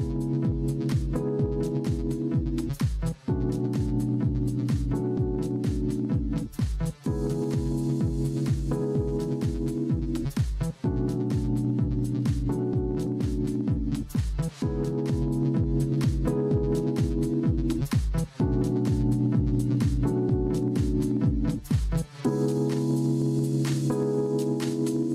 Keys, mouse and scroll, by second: 6.1-8.5 drag, 18.6 click.